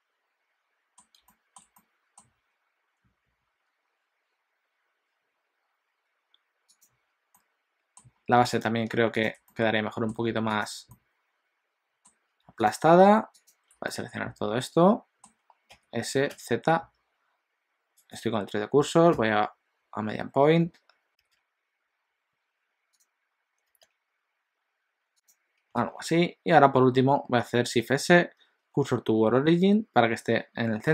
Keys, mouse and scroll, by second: 1.3 shift+middle click, 1.8 middle click, 6.9 click, 7.3 middle click, 8.6 shift+click, 9.3 click, 9.6 middle click, 10.5 shift+click, 10.9 middle click, 12.7 shift+click, 13.4 shift+click, 13.9 middle click, 15.7 s, 25.8 alt+a, 27.7 shift+s.